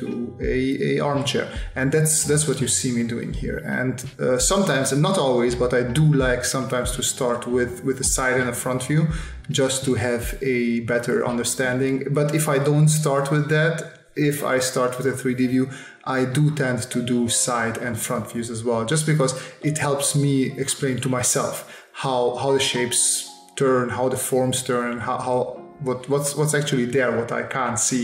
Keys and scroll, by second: 2.6 space, 3.6 space, 4.7 space, 7.0 space, 8.4 s, 11.0 s, 16.4 space, 17.4 space, 18.2 space, 19.3 space, 21.7 space, 23.4 space, 24.8 s, 26.5 space.